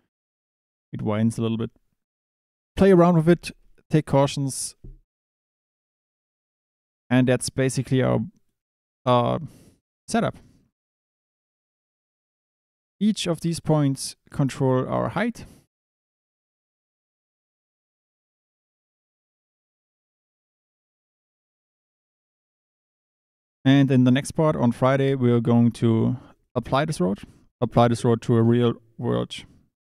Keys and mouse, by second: 7.5 click, 8.0 Tab, 8.4 click, 8.6 Tab, 9.4 click, 11.8 KP_7, 13.1-14.6 drag, 17.2 click, 20.7-23.4 drag, 24.3 Tab, 24.4 click, 25.6 click, 26.3 click.